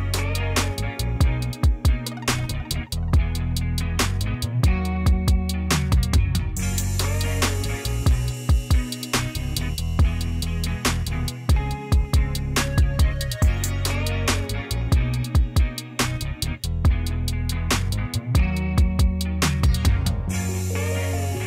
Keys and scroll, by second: 16.8 p, 20.4 c.